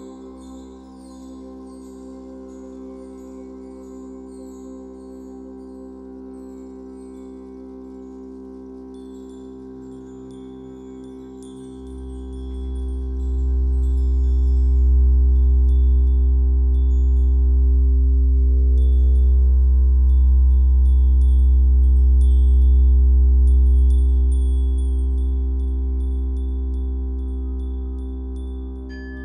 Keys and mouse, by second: 0.0 click, 0.9 ctrl+s, 4.3 click, 5.2 click, 6.9 click, 9.5 click, 10.2 click, 11.8 click, 12.9 click, 14.1 click, 17.1 Tab, 17.5 Right, 18.1 Left, 21.1-22.6 right drag, 22.6 click, 24.7 click, 25.6 click, 26.7 click.